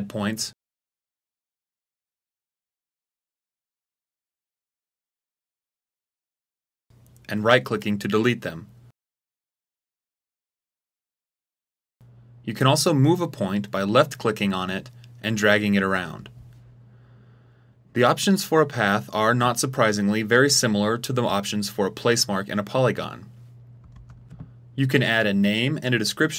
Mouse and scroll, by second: 0.0 click, 0.7 click, 2.4 click, 3.1 click, 4.5 click, 7.3 right click, 8.1 right click, 8.9 right click, 12.8-16.6 drag.